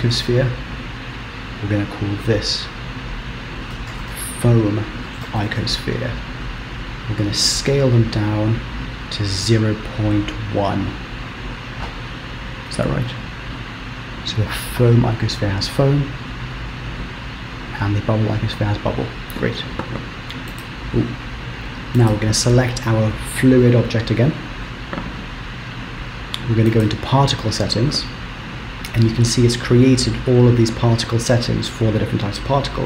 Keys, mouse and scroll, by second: 1.7 click, 3.2 click, 6.5 shift+click, 7.7 s, 11.5 click, 13.2 click, 17.1 click, 22.2 click, 23.8 KP_0, 26.8 click.